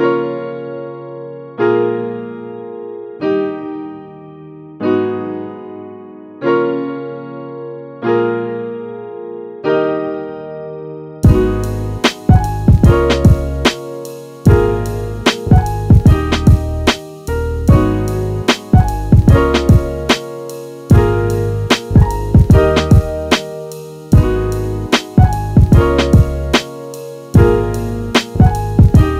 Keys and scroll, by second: 19.3 f, 22.4 f.